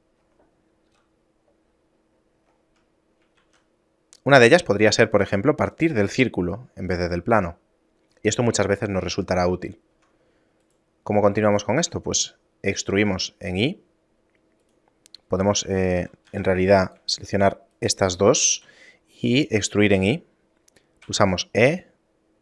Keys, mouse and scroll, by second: 1.0 KP_7, 2.0 middle click, 2.5-2.9 scroll up 5, 3.0 middle click, 3.4 shift+a, 7.6-7.9 scroll up 1, 8.5 middle click, 8.5-9.0 scroll up 1, 9.0-10.0 scroll down 1, 10.0 Tab, 10.7 right click, 11.6 shift+right click, 13.0 e, 16.1 ctrl+z, 16.4 ctrl+z, 17.0 right click, 17.4 shift+right click, 17.8 shift+right click, 21.2 e.